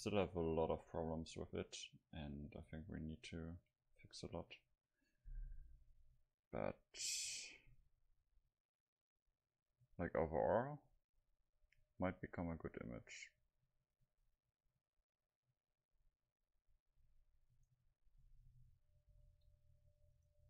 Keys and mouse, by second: 17.5-19.4 right drag, 19.1 s, 20.3-20.4 right drag.